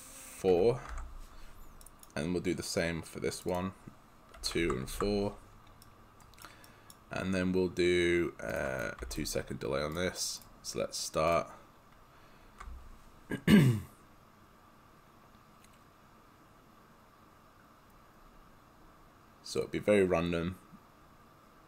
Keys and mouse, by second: 0.6 4, 0.9 Tab, 1.9 right click, 3.4 click, 4.4 2, 4.6 Tab, 4.8 4, 5.0 Tab, 5.9 right click, 8.6 click, 9.1 2, 9.2 click.